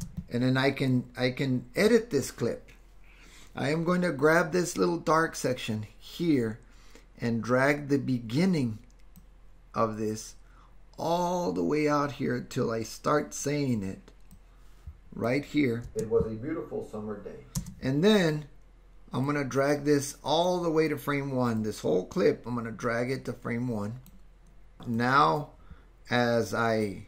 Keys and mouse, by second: 0.0 space, 1.0 click, 9.2-13.6 drag, 14.4 click, 15.8 space, 17.6 space, 18.6-24.1 drag, 25.1-27.0 drag.